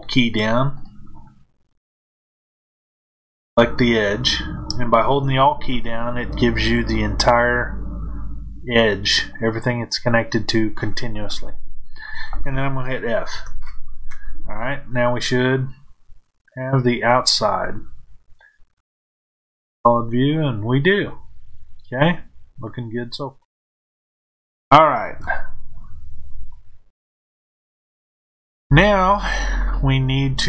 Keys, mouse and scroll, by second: 0.7 click, 2.9 alt+click, 14.8-18.7 middle drag, 18.7 click, 24.3-30.4 middle drag, 25.1 KP_1.